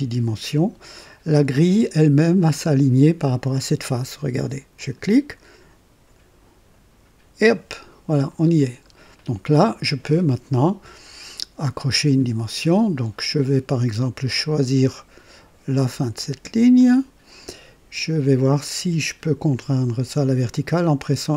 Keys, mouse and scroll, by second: 4.7 click, 8.6 scroll up 1, 9.1 right click, 16.7 click, 21.2 y.